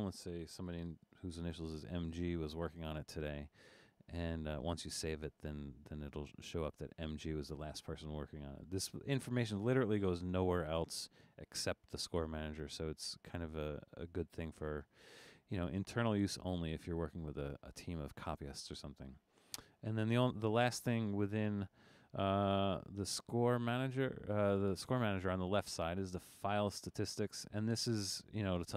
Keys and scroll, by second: 0.6 shift+m, 1.0 shift+g.